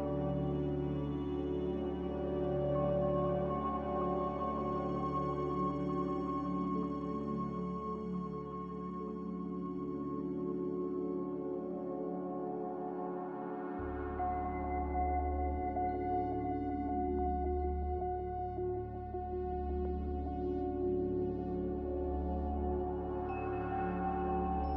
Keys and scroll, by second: 3.4-4.9 typing, 4.9 Return, 8.0 ctrl+z, 10.3 ctrl+z, 14.3-15.2 typing, 19.0 z, 21.5-22.3 typing.